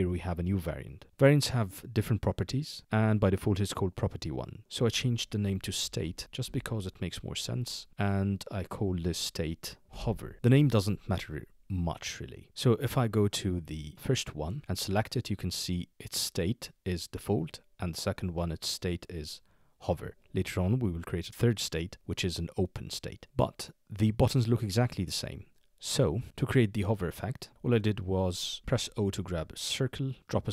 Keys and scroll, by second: 5.6-6.9 typing, 9.6-10.5 typing, 28.6 o.